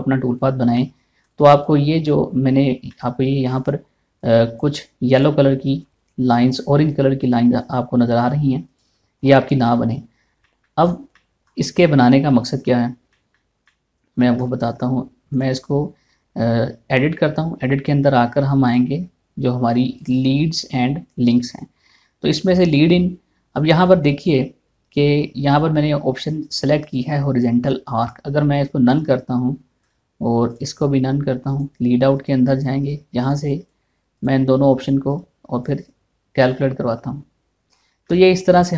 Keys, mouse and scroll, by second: 0.4-1.8 middle drag, 1.8 click, 2.6-4.8 middle drag, 4.8 click, 6.6-7.0 scroll up 2, 7.0 shift+middle click, 7.8 click, 9.8 scroll down 1, 11.0 shift+middle click, 11.4 scroll down 1, 11.7 middle click, 13.2 scroll down 1, 13.8 shift+middle click, 15.9 click, 19.3 click, 30.5 click, 38.3-38.6 scroll down 1, 38.6 middle click.